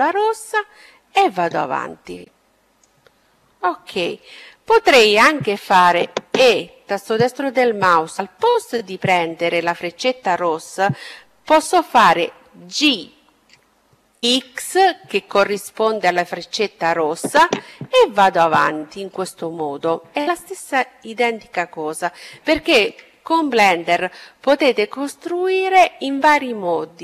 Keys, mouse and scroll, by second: 3.2-4.7 middle drag, 5.2 e, 11.5 g, 20.4-23.2 middle drag.